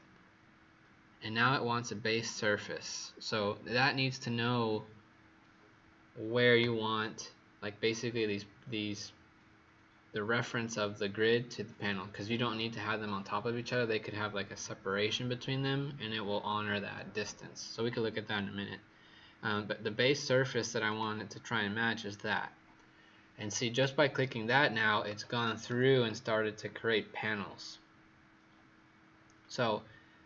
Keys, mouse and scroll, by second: 20.8 click, 25.6 right click.